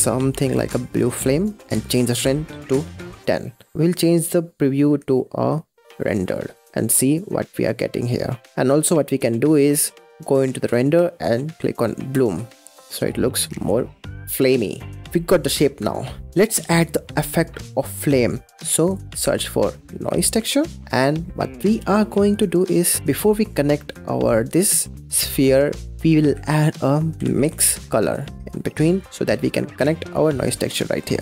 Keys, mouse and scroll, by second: 1.6-3.7 drag, 4.7 z, 6.6-8.4 middle drag, 8.4-10.0 scroll up 5, 10.5 click, 12.0 click, 12.8 click, 13.0 scroll down 5, 13.4 scroll up 6, 14.5-14.9 scroll down 5, 14.9 click, 18.6 scroll down 1, 18.7 click, 19.1 shift+a, 20.8 middle click, 21.0 scroll down 3, 21.4-22.5 middle drag, 22.5-22.9 scroll down 2, 22.9 middle click, 23.7 click, 24.9 click, 25.9 middle click, 26.2 shift+a, 29.2 middle click, 29.9 click.